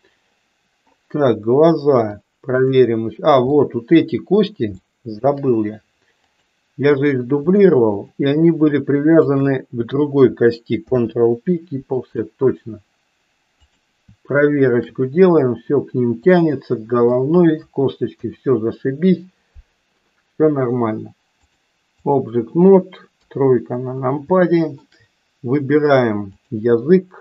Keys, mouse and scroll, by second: 2.3 click, 3.6 middle click, 4.8 shift+middle click, 6.2 click, 10.9 ctrl+p, 16.3-17.3 middle drag, 18.1 KP_1, 21.6 click, 23.1 KP_3, 24.3 shift+middle click, 26.2 click.